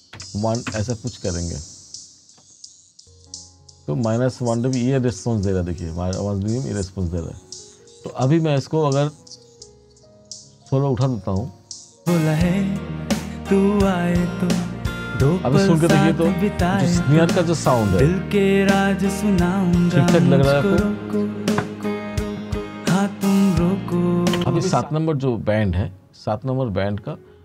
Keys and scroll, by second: 0.2 1, 0.8 Return, 24.4 space.